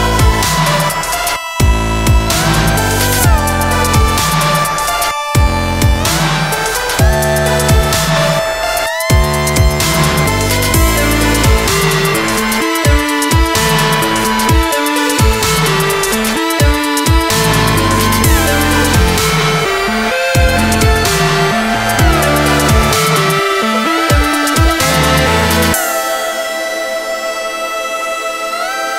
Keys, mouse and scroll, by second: 2.3 click, 2.7 click, 5.2 Delete, 5.6 click, 5.7 click, 6.7 click, 6.9 click, 7.5 middle click, 7.8 middle click, 7.9-8.2 scroll down 1, 8.2 F3, 8.9 alt+middle click, 10.4 alt+scroll up 1, 11.0-11.6 scroll up 1, 12.4 middle click, 13.2 scroll down 1, 14.2 scroll up 1, 14.8 scroll up 1, 16.1 click, 16.2 click, 17.0 click, 17.7 click, 18.2 middle click, 18.6 middle click, 19.8 scroll down 1, 20.6 click, 22.8 click, 23.2 middle click, 23.2 scroll up 1, 24.8 scroll up 1, 25.0 middle click, 25.6 scroll down 1, 26.5 middle click, 28.2 click.